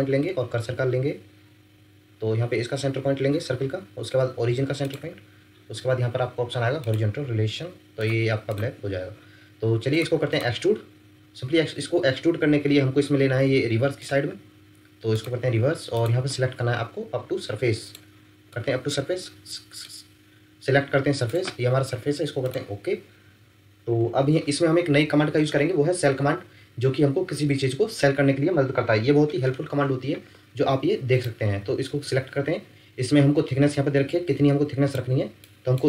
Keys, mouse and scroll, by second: 4.8 shift+click, 8.6 Escape, 10.3 click, 13.0 middle click, 18.5 middle click.